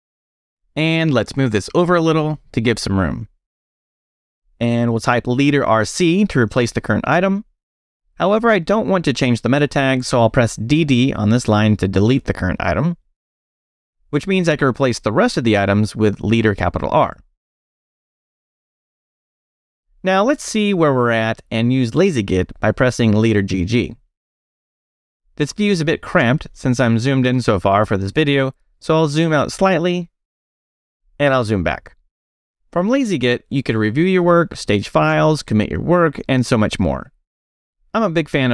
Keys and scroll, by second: 0.0 j, 0.7 j, 2.1 ctrl+Right, 4.8 space, 5.0 r, 5.4 c, 8.3 j, 12.2 d, 15.5 space, 15.8 shift+r, 19.2 Escape, 19.6 shift+;, 19.8 Return, 21.1 space, 21.9 g, 23.3 g, 29.9 super+-, 32.2 super+0, 35.4 Down, 35.5 Up, 35.5 space, 36.0 Down, 36.8 space, 38.2-38.5 typing.